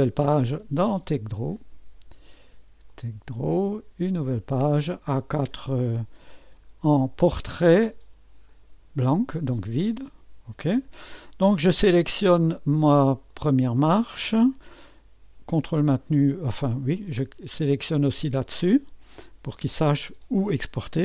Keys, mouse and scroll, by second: 0.2 click, 1.4 click, 2.9 click, 4.5 middle click, 8.5-10.4 drag, 12.9 click, 13.3-14.5 drag, 17.0 ctrl+click.